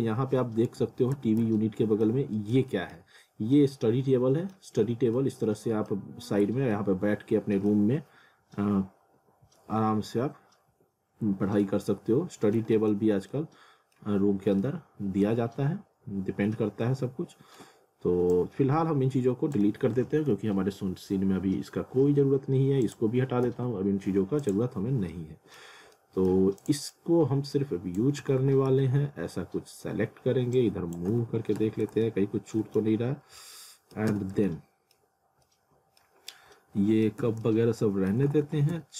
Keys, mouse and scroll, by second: 0.8 ctrl+z, 1.6 middle click, 2.7 alt+middle click, 3.4 scroll, 3.5 scroll up 1, 3.7 alt+middle click, 4.9 scroll down 1, 5.2 alt+middle click, 6.2 scroll up 1, 6.7 alt+middle click, 8.1 F4, 11.3 scroll down 1, 11.6 alt+middle click, 13.1 scroll up 1, 13.3 alt+middle click, 14.2 scroll up 1, 14.6 middle click, 15.9 scroll down 1, 16.8 middle click, 18.3 click, 20.9 scroll down 1, 22.2 scroll up 1, 22.8 click, 24.8 scroll up 1, 25.1 middle click, 25.7 scroll down 1, 26.0 middle click, 26.6 click, 28.2 w, 28.7 z, 29.1-30.0 scroll down 1, 30.5 click, 31.1 w, 31.6 z, 32.0 middle click, 32.8 scroll down 1, 33.4 alt+middle click, 34.1 z, 34.5 alt+middle click, 35.2 scroll up 1, 35.5 alt+middle click, 36.2 scroll up 1, 36.5 middle click, 37.2 z, 37.4 middle click, 38.2 w, 38.7 z.